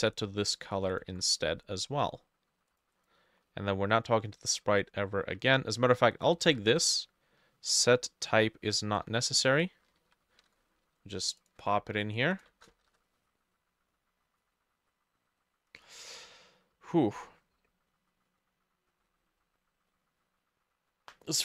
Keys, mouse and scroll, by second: 0.6 double click, 1.1 ctrl+v, 3.0 double click, 3.5-5.3 scroll down 2, 6.5 ctrl+x, 6.5 typing, 8.0 BackSpace, 8.4 BackSpace, 10.0 ctrl+v, 10.4 ctrl+s, 11.6 Tab, 12.9 ctrl+s, 12.9 shift+Tab.